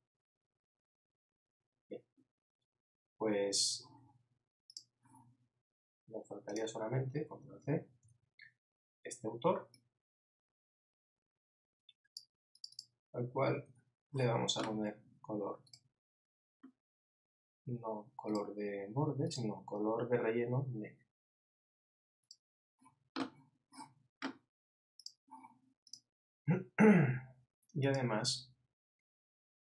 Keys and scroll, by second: 13.8 super+a.